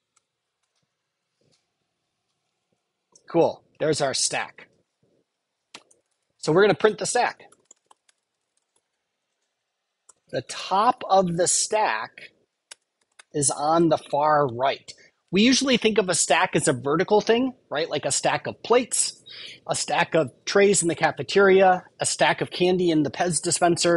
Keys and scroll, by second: 0.1 Return.